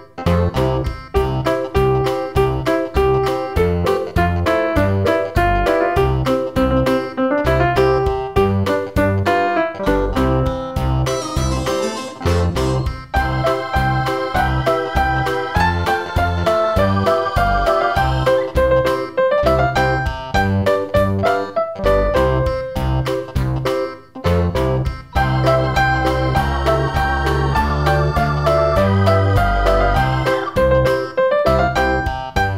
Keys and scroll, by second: 1.9 super+v.